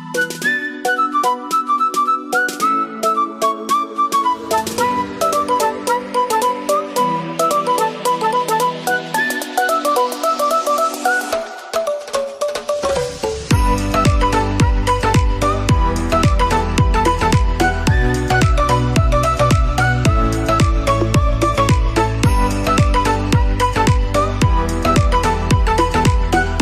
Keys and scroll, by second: 20.2 ctrl+=.